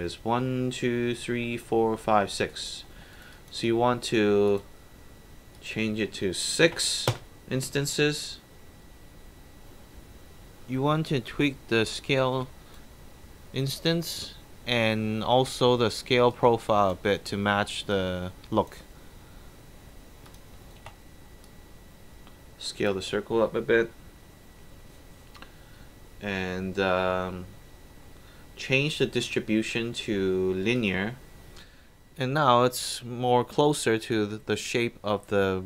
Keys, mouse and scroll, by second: 2.5 alt+right click, 2.9 alt+middle drag, 3.1 alt+right click, 3.3 alt+click, 4.5 alt+click, 5.6 click, 6.7 KP_6, 7.2 Return, 11.3 click, 16.3 click, 17.9-18.4 drag, 20.2 click, 20.8 r, 21.5-22.9 drag, 27.8 scroll up 2, 29.2 click, 30.7 click.